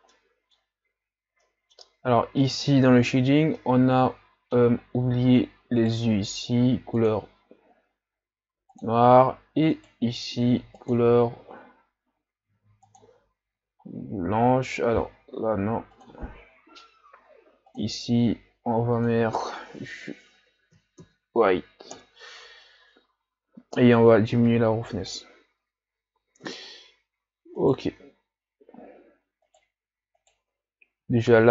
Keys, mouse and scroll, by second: 0.1-2.9 middle drag, 2.9 drag, 3.8-4.8 middle drag, 4.8 scroll up 4, 5.9 right click, 8.9-9.8 drag, 9.8 right click, 11.1-15.4 drag, 16.2-22.1 drag, 24.6-26.6 drag, 26.6 right click, 27.6 shift+right click, 29.5 right click, 30.3 shift+right click.